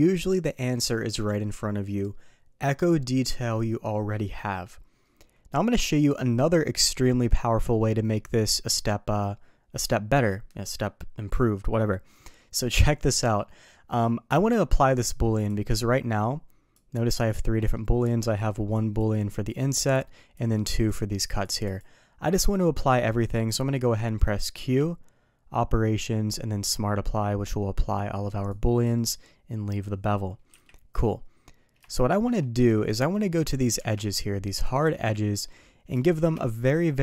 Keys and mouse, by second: 13.1 middle drag, 15.4 click, 16.8 click, 17.5 middle click, 18.7 click, 19.3 click, 20.3 click, 21.4 click, 21.6 click, 24.5 q, 30.5 KP_3, 31.9-32.2 shift+middle drag, 32.7-33.1 middle drag, 33.7 Tab, 34.6 click, 34.9-35.4 middle drag, 36.0-36.3 shift+middle drag.